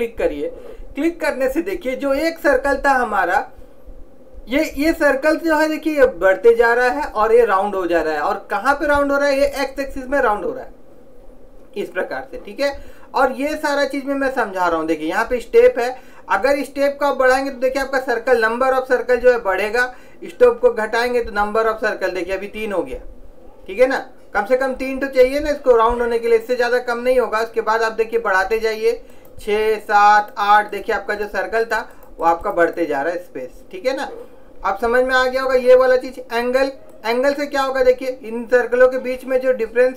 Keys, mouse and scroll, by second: 11.5-16.6 middle drag, 16.6 click, 29.3-34.8 drag, 37.1 click.